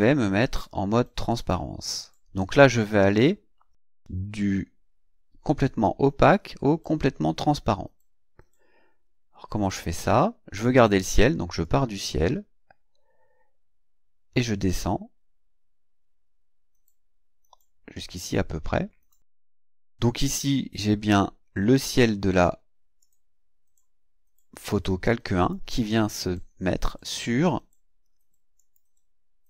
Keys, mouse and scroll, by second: 1.3 click, 11.6-19.3 drag, 23.0-25.7 drag, 28.6 click.